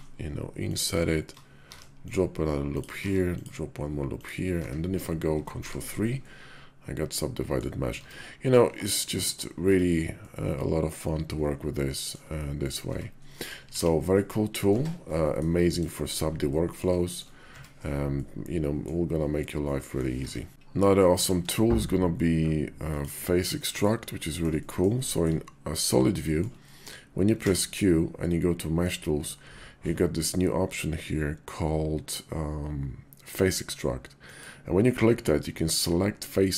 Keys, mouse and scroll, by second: 1.4 ctrl+r, 2.8 ctrl+r, 4.4 Tab, 5.5 ctrl+3, 6.0-7.4 drag, 7.8 Tab, 8.3 click, 9.4 Tab, 10.0-12.0 drag, 12.4 click, 12.7 Tab, 13.1 click, 13.6 alt+x, 14.0 click, 14.5 Tab, 15.0 drag, 15.7 shift+drag, 16.3-16.6 drag, 17.3 Tab, 17.9 click, 19.4 click, 20.8 x, 20.9 shift+a, 23.4 drag, 24.0 shift+drag, 24.4 drag, 24.9 shift+drag, 25.7-26.2 shift+drag, 26.5 click, 27.1 q.